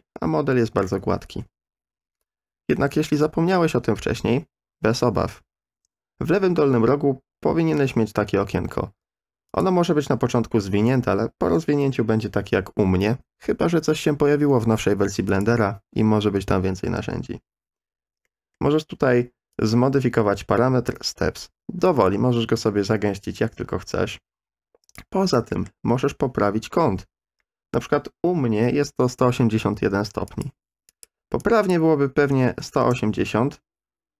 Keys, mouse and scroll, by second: 9.5 click, 15.4 click, 18.2-18.5 middle drag, 19.7-25.0 drag, 25.5 middle click, 30.5-33.0 drag.